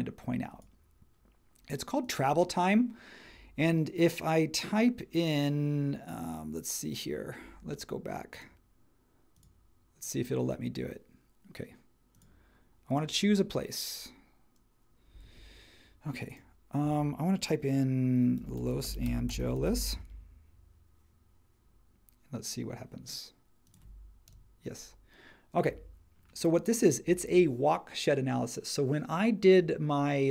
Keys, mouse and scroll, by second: 15.2 Escape, 18.1-20.3 typing, 21.9 typing, 24.3 Return.